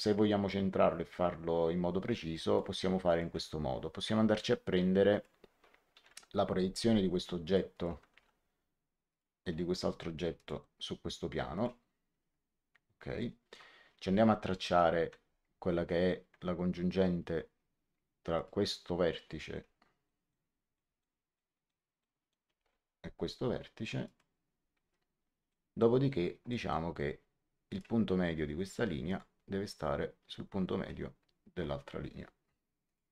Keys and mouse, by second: 3.0 click, 5.0 click, 6.0 p, 7.4 click, 8.1 x, 9.0 click, 10.3 click, 11.5 click, 13.1 middle click, 14.6 l, 18.3 click, 19.0 middle click, 24.0 click, 25.4 middle click, 27.6 click, 29.0 click, 32.8 click.